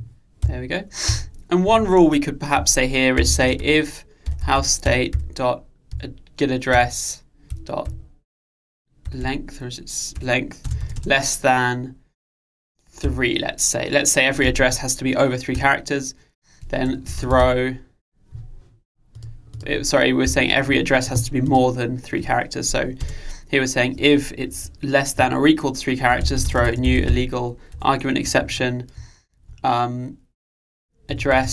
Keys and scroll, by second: 4.9 Return, 27.8 Return.